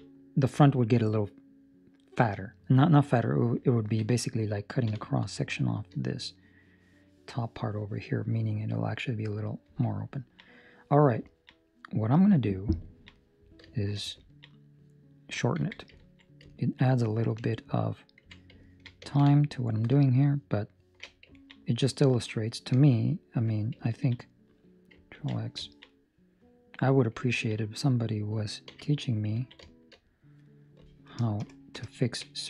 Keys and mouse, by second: 0.0 middle click, 2.8 middle click, 3.7 ctrl+middle click, 4.0 middle click, 4.8 KP_7, 5.4 shift+middle click, 10.1 ctrl+middle click, 10.5 middle click, 11.2 ctrl+middle click, 11.5 middle click, 12.8 ctrl+middle click, 13.1 middle click, 13.8 shift+middle click, 14.3 ctrl+middle click, 14.4 middle click, 15.6 Tab, 15.9 ctrl+middle click, 16.5 ctrl+middle click, 16.8 middle click, 18.2 2, 18.6 ctrl+middle click, 19.4 alt+right click, 20.0 alt+shift+right click, 21.3 ctrl+middle click, 21.5 middle click, 23.0 alt+right click, 23.8 ctrl+middle click, 24.1 middle click, 25.1 ctrl+x, 25.6 ctrl+middle click, 25.8 middle click, 27.2 ctrl+middle click, 27.5 middle click, 28.6 3, 28.9 right click, 29.4 ctrl+middle click, 29.8 shift+middle click, 31.0 ctrl+KP_Add, 31.3 ctrl+KP_Add, 31.7 ctrl+KP_Add.